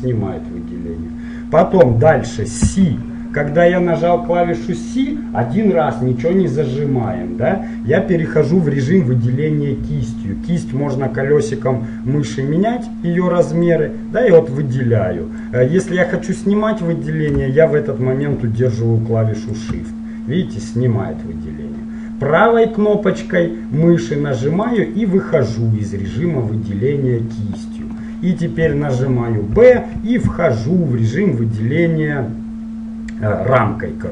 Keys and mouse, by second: 2.7 c, 24.8-29.7 middle drag, 29.7 b.